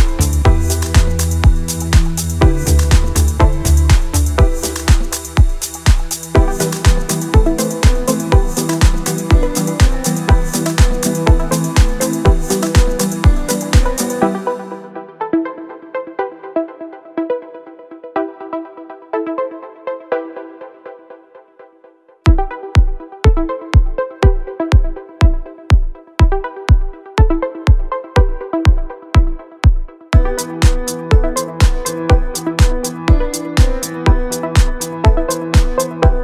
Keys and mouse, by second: 0.0-1.0 typing, 0.0 middle click, 0.2 click, 0.7 middle click, 0.7 ctrl+z, 0.9 ctrl+z, 0.9 right click, 1.1 shift+middle click, 1.6 middle click, 1.9 middle click, 2.2 e, 2.4 click, 2.4 d, 2.4 middle click, 2.6 click, 2.6 right click, 2.7 ctrl+z, 2.8 ctrl+z, 2.8 middle click, 2.8 ctrl+z, 3.0 shift+middle click, 3.2 ctrl+r, 3.5 middle click, 4.3 middle click, 4.4 d, 4.4 click, 4.7 d, 4.8 click, 4.8 d, 5.0 d, 6.4-7.7 typing, 6.5 shift+middle click, 6.8 click, 7.1 click, 7.5 right click, 7.9 middle click, 8.3 middle click, 9.0 middle click, 9.2 middle click, 9.3 click, 9.3 d, 9.8-10.9 d, 9.9 click, 10.1 right click, 10.2 click, 10.9 ctrl+r, 11.1 middle click, 11.3 middle click, 11.4 middle click, 12.1 middle click, 13.3 middle click, 13.5 middle click, 14.1 middle click, 14.5 middle click, 14.7 middle click, 15.1 ctrl+r, 15.4 middle click, 15.5 middle click, 15.6 middle click, 16.0 middle click, 16.8 middle click, 17.6 middle click, 18.5 middle click, 18.6 middle click, 18.9 middle click, 19.1 middle click, 19.4 middle click, 19.7 middle click, 19.9 a, 19.9 middle click, 20.3 right click, 20.7 middle click, 21.9 KP_3, 22.1 middle click, 22.5 right click, 22.6 middle click, 22.9 KP_3, 23.4 middle click, 23.6 middle click, 23.7 Tab, 23.8 middle click, 24.3 right click, 24.4 middle click, 24.8 middle click, 25.1 middle click, 25.1 right click, 25.2 middle click, 25.5 Tab, 25.8 a, 26.1 right click, 26.9 right click, 27.3 right click, 27.8 middle click, 28.0 middle click, 30.3 KP_3, 31.0 shift+middle click, 33.2 middle click, 34.1 middle click, 34.4 KP_3, 35.0 shift+middle click, 35.4 shift+click, 35.5 middle click, 36.0 KP_7, 36.1 shift+middle click.